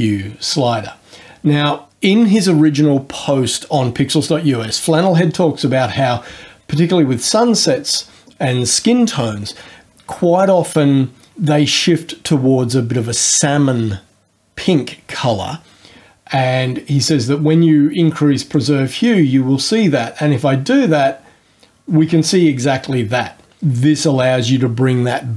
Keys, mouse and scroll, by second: 18.5-23.5 drag.